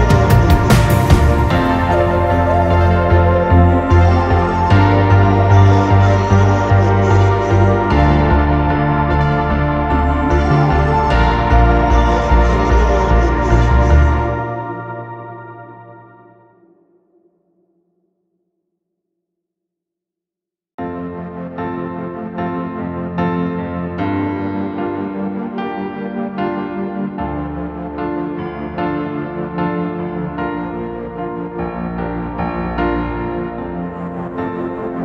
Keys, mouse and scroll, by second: 0.0-0.3 typing, 1.4 scroll down 1, 1.7 middle click, 3.5 scroll up 1, 3.7 scroll down 1, 4.0-4.4 scroll up 1, 4.4 r, 4.5-5.2 scroll up 1, 5.2 scroll down 1, 7.2 r, 7.2 right click, 8.1 double click, 8.5 right click, 9.2 double click, 9.7-10.7 typing, 10.5 Return, 11.0 middle click, 12.2 typing, 12.4-13.6 scroll up 1, 13.9 typing, 14.1 double click, 14.3 right click, 14.8 double click, 15.4-16.3 typing, 16.0 Return, 16.2 scroll down 1, 17.1 middle click, 17.3 scroll down 1, 17.5 scroll up 1, 18.1 middle click, 19.0 middle click, 19.3 space, 19.4-19.8 scroll down 1, 19.8 middle click, 20.6 scroll up 1, 21.0 middle click, 21.1 scroll up 1, 22.3-22.6 typing, 22.4 Return, 23.2 scroll down 1, 23.8 middle click, 24.2-25.1 scroll up 1, 25.1 scroll down 1, 25.4 typing, 27.7 Return, 27.7 0, 30.0 scroll up 1, 30.5 scroll up 1, 30.9 scroll down 1, 31.2 scroll up 1, 32.0 middle click, 33.1 r.